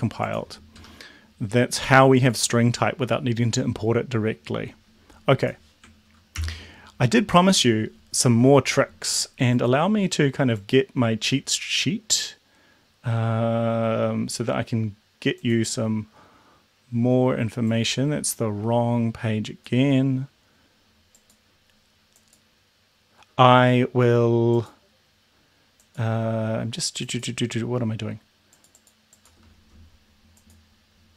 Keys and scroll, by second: 0.8 BackSpace, 6.3 ctrl+l.